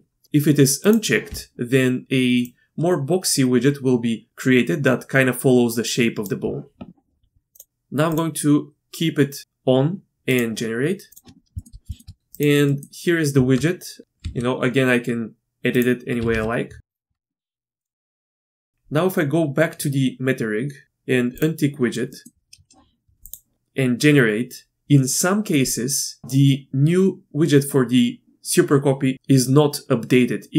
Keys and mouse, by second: 0.8 click, 1.3-6.4 d, 2.4-6.4 drag, 7.5 click, 8.1 click, 10.3 click, 11.1 click, 11.5 shift+middle drag, 11.9 shift+middle click, 12.4 click, 12.7 click, 13.3 Tab, 14.2 s, 16.2 r, 17.1 Tab, 18.3 Tab, 21.3-21.9 drag, 22.1 click, 23.2 click.